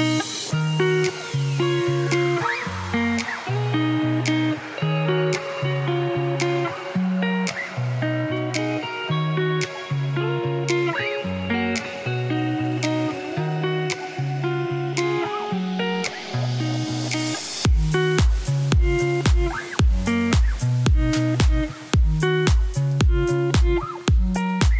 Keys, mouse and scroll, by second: 0.1 g, 2.8 ctrl+KP_Add, 2.9 ctrl+KP_Add, 3.6 s, 4.8 ., 5.4 middle click, 5.9 3, 7.7 shift+middle click, 7.8 shift+scroll down 3, 8.2 Tab, 8.6 scroll down 1, 8.7-10.0 middle drag, 13.3 scroll down 2, 13.5-14.6 middle drag, 14.6 shift+d, 16.0 click, 16.6-17.9 drag, 17.9 alt+r, 18.3 g, 19.2-19.6 scroll up 1, 19.6 shift+middle click, 19.9 click, 22.6 ctrl+a, 23.6 Tab, 23.8 scroll down 1, 24.4 middle click.